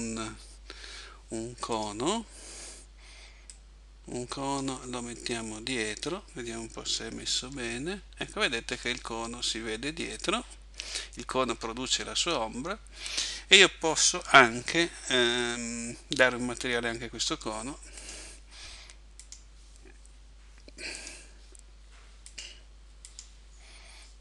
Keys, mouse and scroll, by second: 3.5 click, 17.2 Escape, 18.0 right click, 19.3 right click, 21.0 click, 22.3 right click, 23.1 right click.